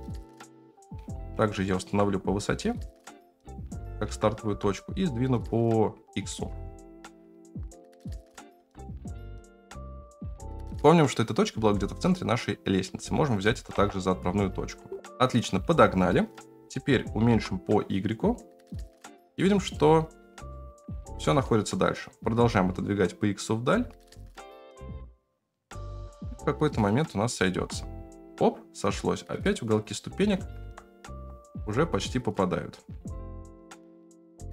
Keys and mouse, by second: 1.6 middle drag, 2.4 g, 3.8 g, 6.3 g, 8.5 g, 11.5 g, 13.7 KP_0, 16.6 s, 20.5 shift+middle click, 21.0 g, 27.3 shift+middle click, 30.2 s, 34.0 s, 34.1 s.